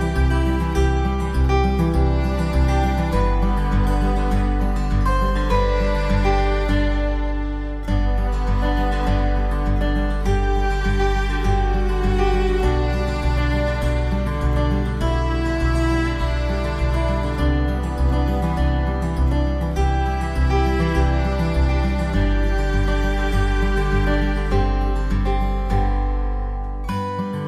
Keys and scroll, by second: 3.9 ctrl+z, 13.7 ctrl+0, 15.1 ctrl+=, 19.9 ctrl+=.